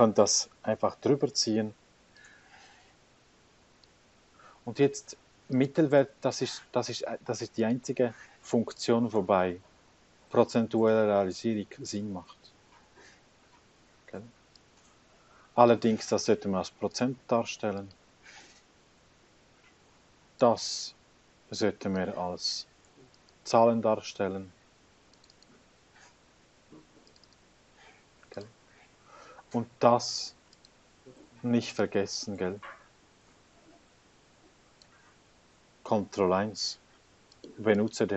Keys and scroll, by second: 36.1 ctrl+1.